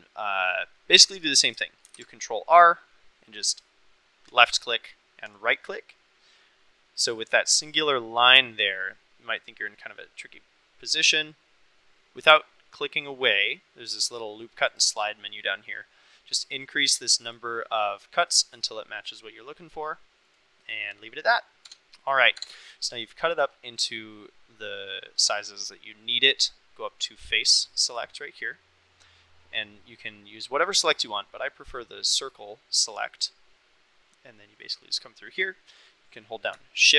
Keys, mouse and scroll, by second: 1.8 ctrl+r, 5.2 click, 14.7 click, 16.3-17.3 drag, 21.6 Tab, 22.0 click, 22.3 Tab, 27.8 click, 29.1-31.7 drag, 33.1-35.4 drag.